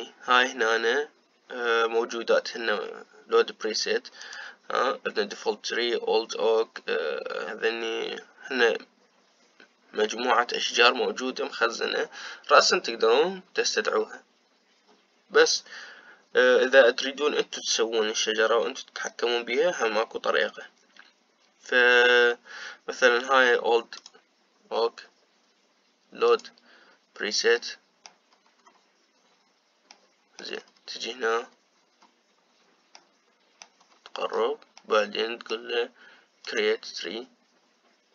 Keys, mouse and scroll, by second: 24.8 click, 27.2-28.3 drag, 28.3 middle click, 29.2-30.6 scroll up 4, 30.6 middle click, 31.4-33.7 scroll up 11, 33.7-34.7 middle drag, 34.7-35.5 scroll up 3, 35.5-37.1 middle drag, 37.1-38.1 drag.